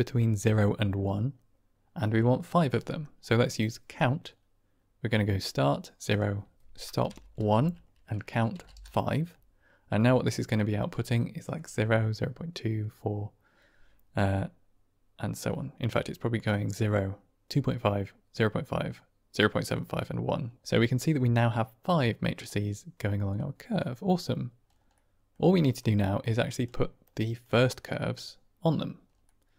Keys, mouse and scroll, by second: 2.9 middle click, 3.8 click, 6.1-9.2 drag, 10.7-11.5 drag, 21.0 middle drag, 22.0-22.4 drag, 23.4-23.7 drag, 24.8 middle click, 26.5 drag, 27.1 click, 29.1 middle click.